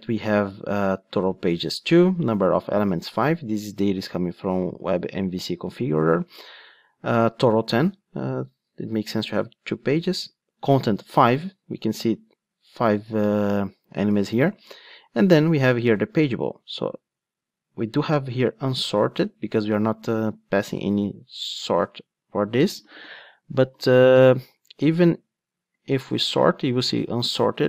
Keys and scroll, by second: 25.8 alt+super+r.